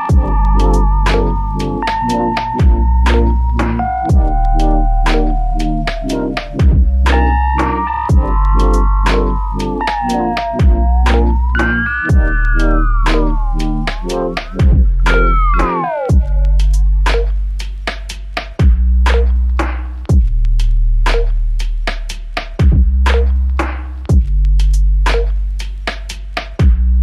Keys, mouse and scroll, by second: 1.7 double click, 5.2 ctrl+click, 17.6 ctrl+click.